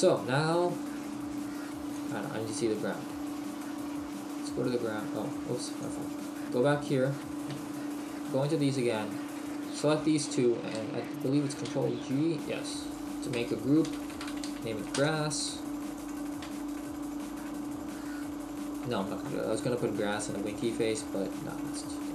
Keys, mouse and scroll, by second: 0.0-0.6 scroll down 1, 0.6 scroll down 1, 2.0 click, 2.8 scroll down 1, 3.6 middle click, 4.1 scroll down 1, 4.9-5.6 scroll up 1, 5.9 click, 6.4 scroll up 5, 6.9-7.4 scroll up 4, 7.6 KP_Decimal, 8.5-8.9 scroll down 1, 9.4 shift+right click, 10.1 middle click, 11.7 ctrl+g, 12.8 click, 16.0 click, 21.3-22.0 scroll down 1, 22.0 middle click.